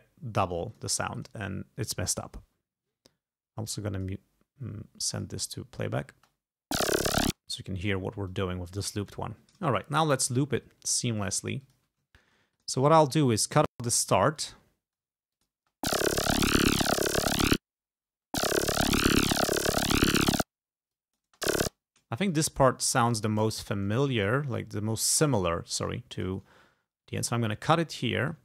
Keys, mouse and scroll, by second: 0.8 click, 1.2 click, 3.8 click, 5.2 click, 6.2 space, 7.3 space, 8.4 click, 10.6-11.4 ctrl+scroll up 4, 11.7 ctrl+click, 12.1 ctrl+scroll up 2, 12.6 ctrl+click, 13.2 s, 13.5 shift+click, 13.8 shift+right click, 14.3-14.8 ctrl+shift+scroll down 4, 15.4 ctrl+click, 15.6 ctrl+space, 17.5 space, 18.1 space, 20.4 space, 20.9 click, 21.3 space, 21.7 click, 22.3 click, 22.8 s, 23.2 shift+right click, 24.2 click, 24.6 click, 25.2 click, 25.9 s, 26.2 click, 27.4 ctrl+scroll up 2, 28.0 ctrl+scroll down 2.